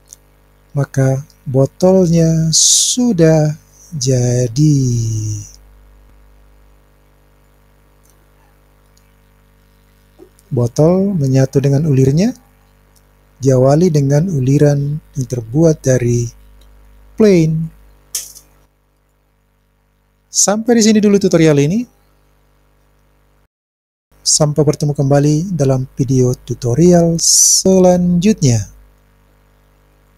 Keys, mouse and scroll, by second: 0.8-4.0 middle drag, 5.1-7.6 drag, 8.9-17.6 middle drag, 19.1-21.0 middle drag.